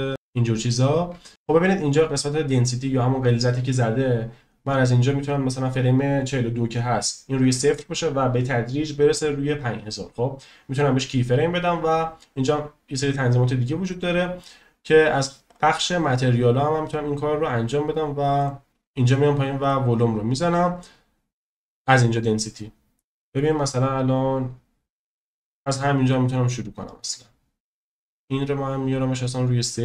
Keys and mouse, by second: 0.2 shift+middle click, 18.5 click, 19.6 click, 23.8-25.6 drag, 28.2 click.